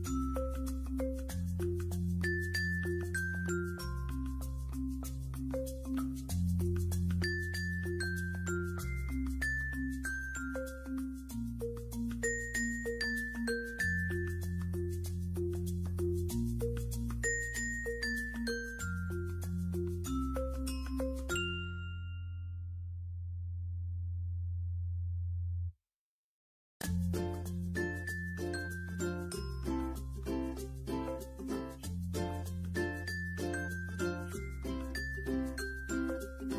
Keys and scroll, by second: 14.6 space, 20.6 space.